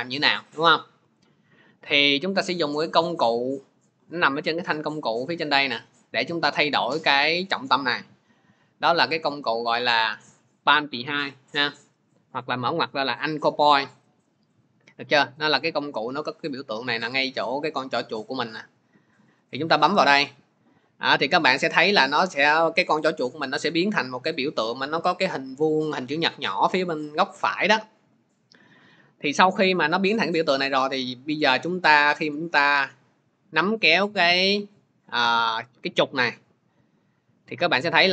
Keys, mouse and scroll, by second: 19.3-24.4 drag.